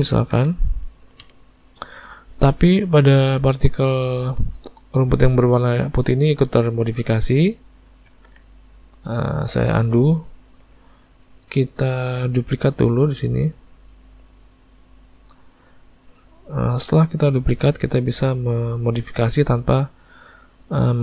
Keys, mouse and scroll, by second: 8.4 ctrl+z, 14.1 click, 17.2 middle click, 18.2 click, 19.0 click, 20.1 middle click.